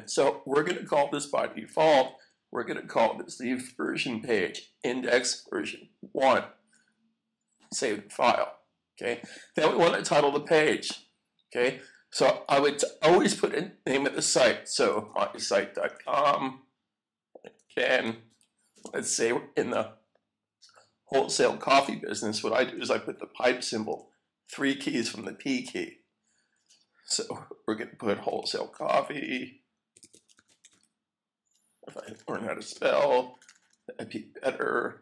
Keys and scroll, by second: 1.9 shift+-, 3.2-5.8 typing, 7.7 typing, 14.1-19.3 typing, 23.6 typing, 28.0-31.3 typing, 32.5-33.3 typing, 34.7-35.0 typing.